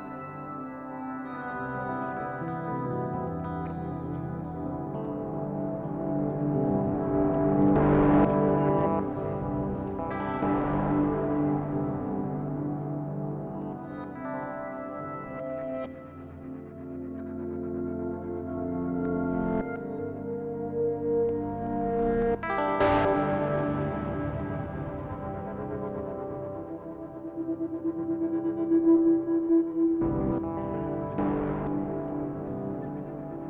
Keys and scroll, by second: 13.4 ctrl+space, 28.9 ctrl+0, 31.3 ctrl+d.